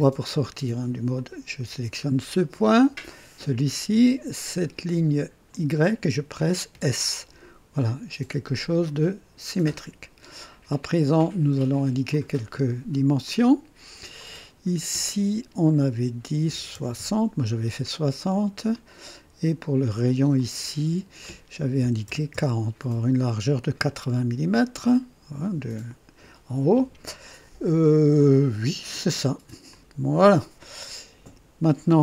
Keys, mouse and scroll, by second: 1.1 click, 3.0 click, 5.5 click, 6.7 s, 8.8-10.0 drag, 11.3 right click, 12.1 click, 12.1 s, 13.2 click, 14.2 click, 16.4 KP_6, 16.7 KP_0, 16.9 Return, 18.8 click, 20.3 click, 21.8 KP_4, 22.0 KP_0, 22.3 KP_Enter, 22.3 Return, 23.6-24.8 typing, 24.4-24.8 scroll down 1, 29.7 click.